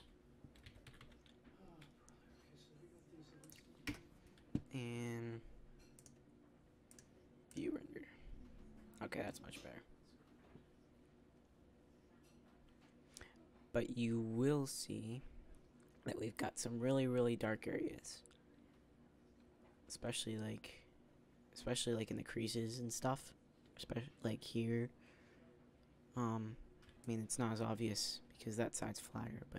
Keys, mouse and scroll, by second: 0.5 s, 3.7 KP_0.